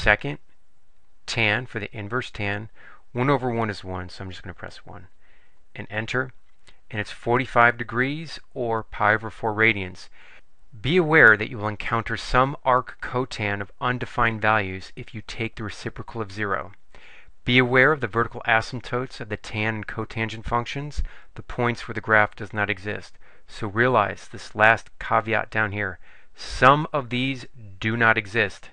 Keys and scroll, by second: 4.5 1, 5.7 Return.